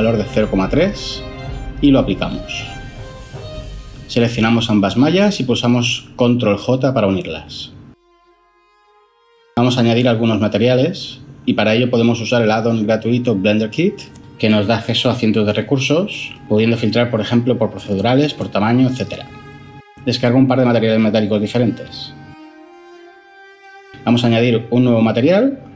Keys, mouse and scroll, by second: 1.1-1.7 typing, 5.3 ctrl+j, 16.8-18.0 typing.